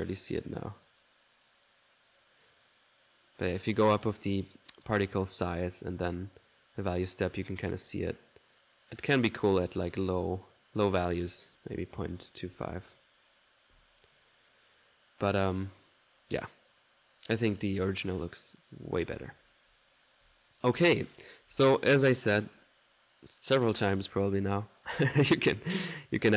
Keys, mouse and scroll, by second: 0.2 ctrl+middle click, 0.8 ctrl+click, 1.5-4.3 drag, 5.2 click, 6.1 click, 8.2-10.6 drag, 11.3 click, 16.7 click, 18.1-19.7 drag, 19.7 middle click, 20.3 click, 21.2 ctrl+click, 21.6 ctrl+s, 23.6 click, 25.7 click.